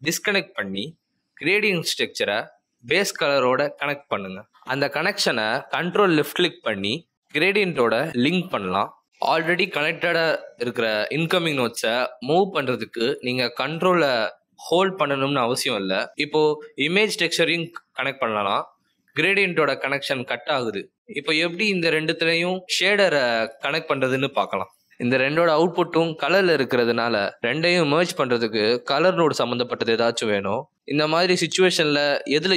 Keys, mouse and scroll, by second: 8.1 ctrl+click, 15.3 ctrl+click, 20.5 ctrl+click, 23.8 click, 27.9 ctrl+click.